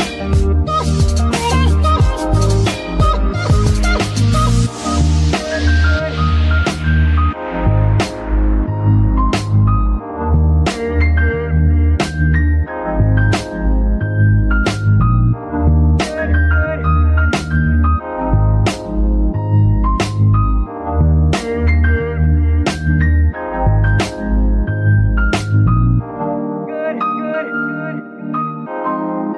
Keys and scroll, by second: 1.9 g, 2.1 Escape, 4.3 shift+g, 5.1 Escape, 8.5 shift+g, 9.0 shift+Escape, 11.5 g, 11.7 Escape, 18.8 ctrl+Tab, 25.0 g, 25.1 y, 26.8 Escape, 28.4 g, 28.6 y.